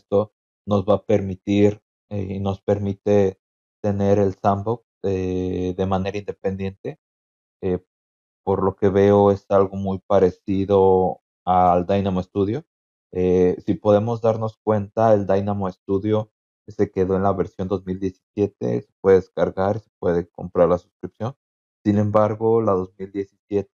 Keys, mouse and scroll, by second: 8.7-9.4 scroll down 4, 14.8 scroll down 2.